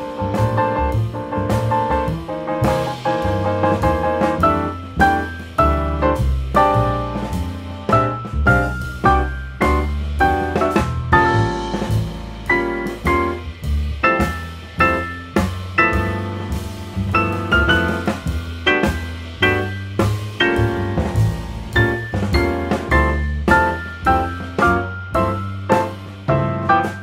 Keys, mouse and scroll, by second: 0.3 g, 2.1-3.2 middle drag, 3.2 click, 3.9 g, 5.6 r, 7.3-8.4 middle drag, 8.4 scroll down 2, 8.6-9.5 middle drag, 9.5-11.5 scroll up 1, 12.0 click, 12.9 click, 13.4 click, 15.8 r, 18.2 g, 19.2 g, 20.8 click, 21.1-22.6 middle drag, 22.6 ctrl+z, 23.0 g, 24.3-25.2 middle drag, 25.2 click, 25.5-26.7 middle drag, 26.7 click.